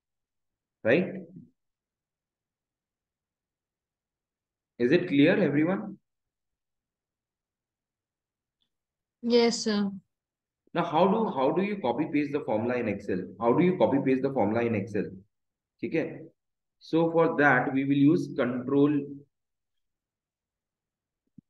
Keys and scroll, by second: 11.8 shift+Down, 12.8 Down, 14.8 Up, 16.8 Down.